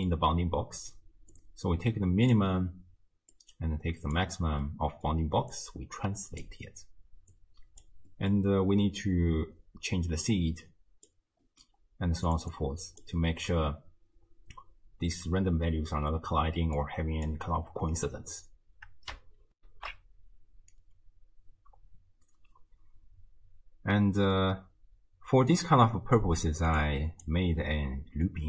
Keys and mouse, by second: 1.4-2.4 drag, 3.4-4.2 drag, 4.7-5.2 middle drag, 5.5 click, 7.4 click, 8.2 middle click, 9.0-11.1 drag, 11.5 middle click, 12.3 click, 12.6-13.0 drag, 16.8-17.3 drag, 19.6 ctrl+alt+shift+q, 26.9 click, 27.6-28.4 middle drag.